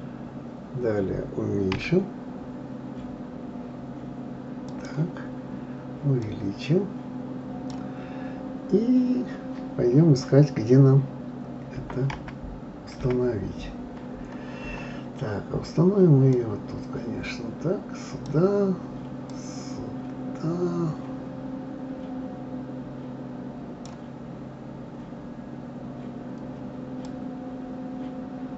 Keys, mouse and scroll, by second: 6.2-8.3 drag, 8.3-8.7 scroll down 2, 11.8 KP_0, 12.1 KP_1, 13.0 KP_1, 13.8-16.3 scroll up 5, 16.3-22.3 drag, 24.5-27.0 scroll up 8, 27.0-28.5 drag.